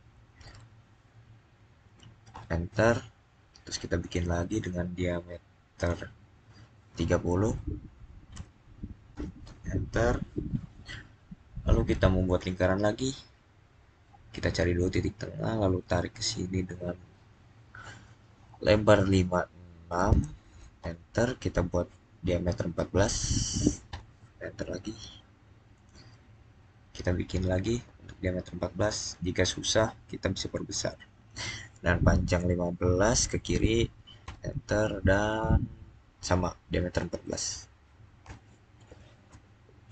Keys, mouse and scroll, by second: 0.0-0.3 typing, 2.2 Return, 3.9 click, 7.9 typing, 9.0 Return, 12.1 click, 19.0 click, 19.7-20.5 typing, 20.7 Return, 22.6 typing, 23.7 Return, 25.6 click, 27.2-27.9 scroll up 1, 32.9-33.2 scroll up 1, 33.0-33.7 typing, 34.1 Return, 36.4-37.4 typing, 38.1 Return.